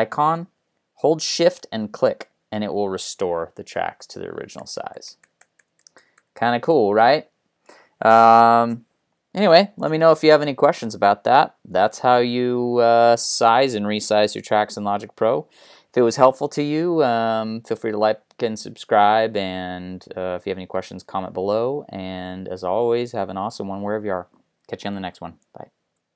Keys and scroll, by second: 4.4 ctrl+alt+shift+Down, 5.1 ctrl+alt+Up, 7.0 ctrl+alt+Down.